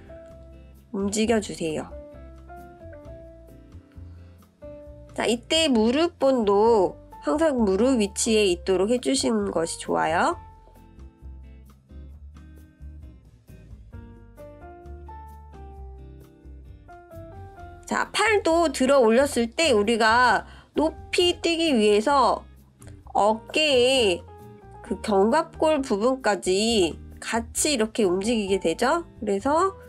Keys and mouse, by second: 7.1 click, 8.1-10.0 drag, 10.9-12.2 middle drag, 13.8 click, 15.2-15.7 shift+middle drag, 17.2 click, 20.2 click, 21.9-23.2 drag, 24.8-26.8 drag, 27.2-28.2 middle drag, 28.5 middle click.